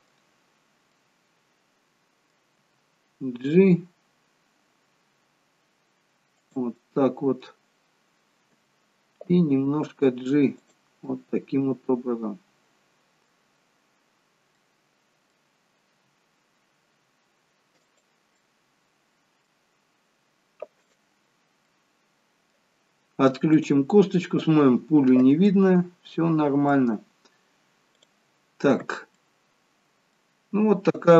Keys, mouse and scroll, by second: 0.4-1.0 scroll up 3, 1.0 middle click, 2.7 g, 6.8 middle click, 7.6-8.7 scroll down 2, 8.7 g, 11.2 middle click, 14.1-14.6 scroll down 2, 14.6 middle click, 16.0 g, 18.5 middle click, 19.8-20.9 scroll up 4, 20.9 click, 21.8 middle click, 23.6 click, 25.5 middle click, 28.0 click, 28.6-29.3 scroll down 2, 29.3 middle click.